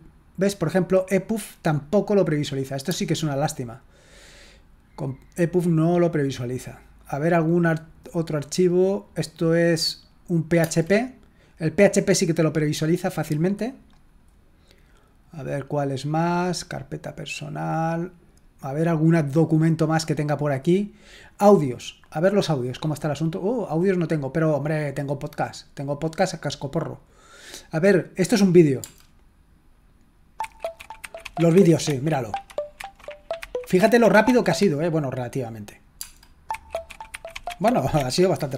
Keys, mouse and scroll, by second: 1.7-3.3 drag, 4.5 click, 5.5 click, 7.0 click, 9.2 click, 14.1 click, 16.7 click, 19.8 click, 21.3 click, 21.9 click, 24.6 click, 27.2 click, 34.6 click, 35.7 click, 38.1 click.